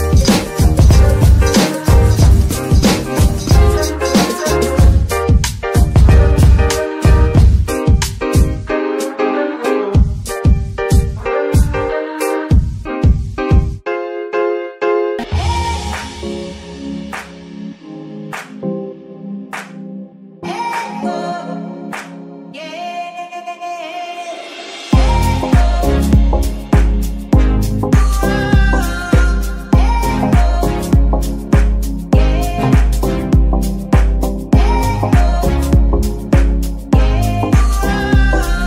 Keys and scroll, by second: 8.5 g, 8.7 x, 25.0 z, 26.6 KP_Divide, 27.9 g, 31.9 [, 32.4 [, 34.9 KP_Divide, 35.4 z, 38.5 shift+z.